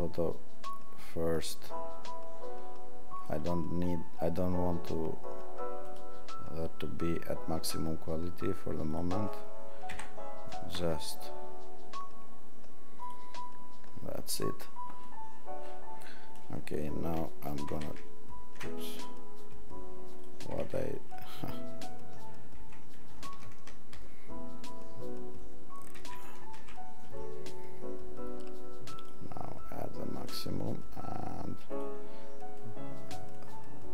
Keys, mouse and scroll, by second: 8.9 click, 17.8 ctrl+alt+shift+3, 17.8 ctrl+alt+shift+w, 22.6 ctrl+d, 26.0 ctrl+alt+shift+w.